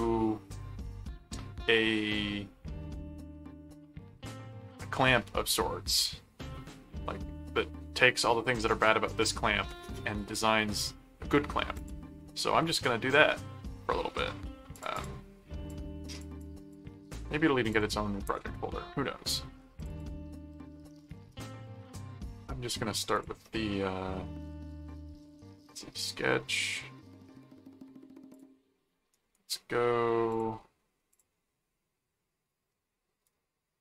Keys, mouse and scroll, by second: 6.6-7.6 middle drag, 9.6 middle click, 11.8 click, 12.3 ctrl+Tab, 14.7 click, 15.7 click, 16.4 click, 17.7 click, 19.8 click, 23.1 click, 26.0 click, 28.3 click, 29.1 right click, 30.3 click, 31.1 click.